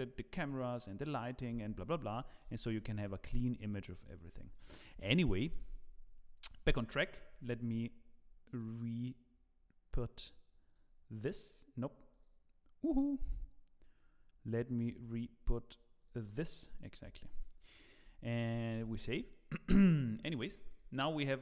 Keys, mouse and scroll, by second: 2.5 z, 2.8-3.3 scroll down 2, 3.0 middle click, 3.9 middle click, 4.4 z, 4.9 scroll up 3, 5.3 shift+middle click, 5.3 shift+middle click, 17.4 middle click, 18.8 ctrl+s, 19.1 middle click, 19.6 shift+middle click, 20.1 scroll up 2, 20.5 shift+middle click, 21.0 scroll up 2.